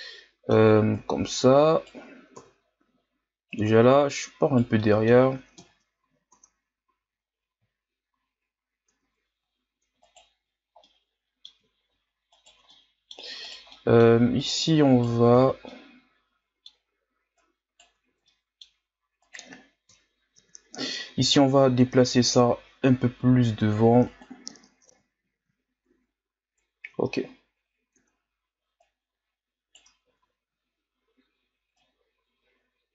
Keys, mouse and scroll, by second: 1.0 right click, 2.4 KP_3, 3.5 right click, 4.8 middle click, 5.6 KP_1, 6.4 Tab, 6.9 a, 7.2-7.6 scroll down 2, 7.9-8.9 shift+scroll up 3, 8.9 Tab, 10.0 alt+right click, 10.8-12.3 middle drag, 12.3 alt+shift+right click, 12.7 middle click, 13.4 right click, 13.7 middle click, 14.4 right click, 15.3 ctrl+z, 15.7-17.4 middle drag, 17.4 right click, 18.1 ctrl+z, 18.3 middle click, 19.2 right click, 19.9 KP_3, 21.2 g, 24.9 KP_1, 25.9 Tab, 27.0-28.0 shift+scroll up 2, 28.0 Tab, 28.8 right click, 30.0 ctrl+z, 31.8 right click.